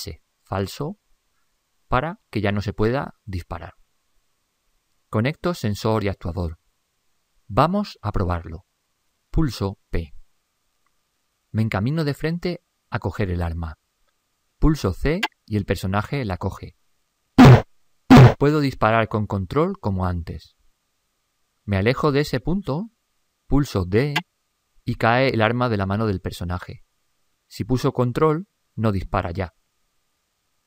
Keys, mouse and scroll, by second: 9.0 ctrl+Up, 10.3 p.